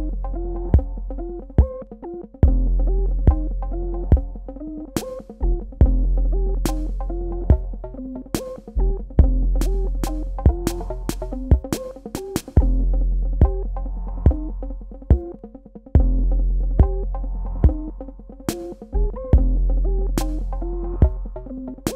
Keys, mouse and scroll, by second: 1.5 click, 8.4 click, 15.8 click, 18.7 super+KP_Add.